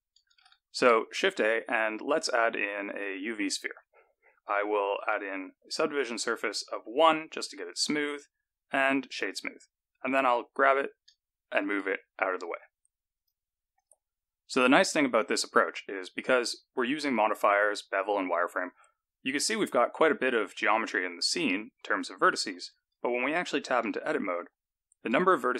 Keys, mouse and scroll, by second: 0.3 shift+a, 4.9 click, 8.0 right click, 10.6 g, 13.7 click, 14.7-16.8 scroll up 2, 17.0 click, 22.5 Tab, 23.8 1, 24.4 scroll down 1, 24.9 a.